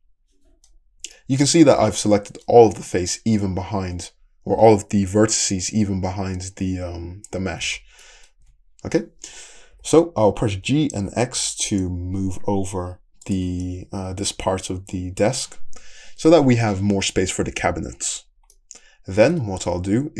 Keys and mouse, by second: 7.7 alt+z, 8.4 `, 9.7 g, 13.4-15.0 middle drag, 13.6 Tab, 15.9 Tab, 15.9-18.2 middle drag, 19.6 `.